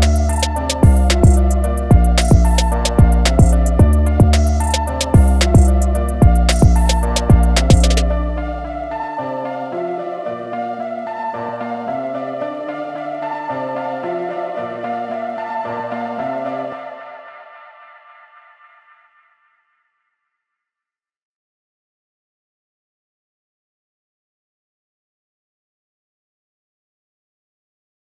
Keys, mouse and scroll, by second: 1.5-2.4 scroll down 1, 2.4 click, 20.7-21.7 alt+scroll up 2.